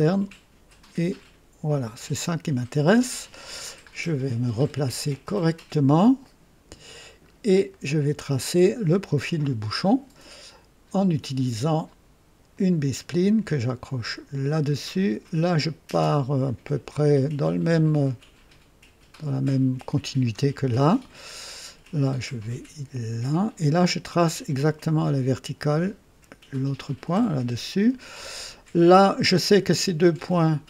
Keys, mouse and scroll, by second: 1.0 click, 4.9 click, 6.1 right click, 7.2 scroll up 1, 7.6 right click, 12.4 click, 14.3 click, 19.0 click, 23.0 click, 26.4 click.